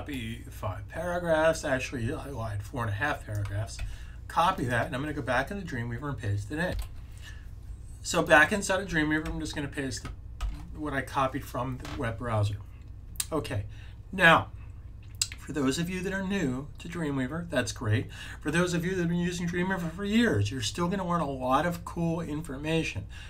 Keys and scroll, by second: 3.6 c, 6.6 super+c, 9.1 super+v, 10.2 super+s.